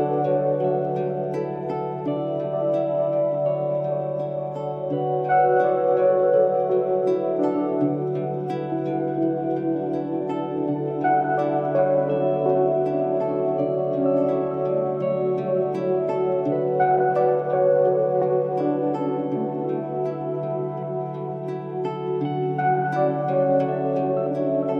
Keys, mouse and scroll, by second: 0.5 alt+click, 5.0 alt+scroll down 1, 5.6-6.3 space, 7.0 click, 9.2 click, 9.8 alt+scroll up 3, 11.9 click, 12.0 click, 14.9 click, 22.6-23.5 scroll up 1, 23.5 click.